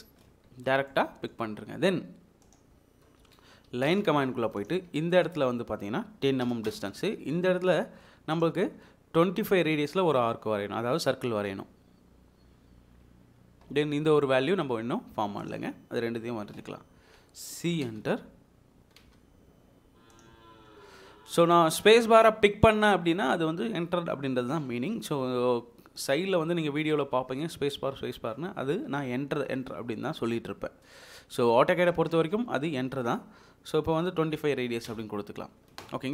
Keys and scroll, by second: 0.0 Escape, 3.2 Escape, 3.8 l, 3.9 space, 6.4 typing, 6.7 Return, 7.3 Escape, 8.3 typing, 17.7 c, 19.0 space, 34.3 typing, 34.9 Return, 35.4 Escape.